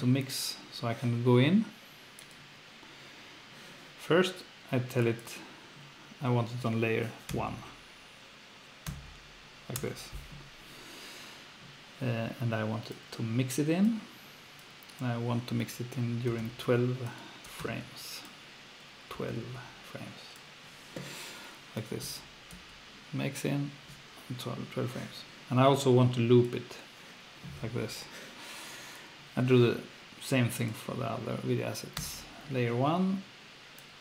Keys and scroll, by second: 7.3 F1, 9.7 Return, 16.4-19.8 typing, 22.5 F2, 27.6 F1, 32.0 1.